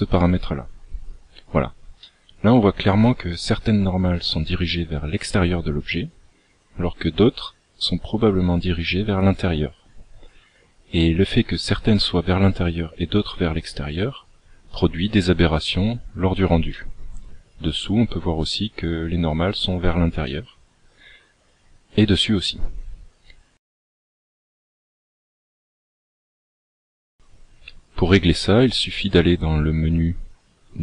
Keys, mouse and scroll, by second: 2.3 middle click, 17.0 middle click, 20.6 middle click, 27.2 click.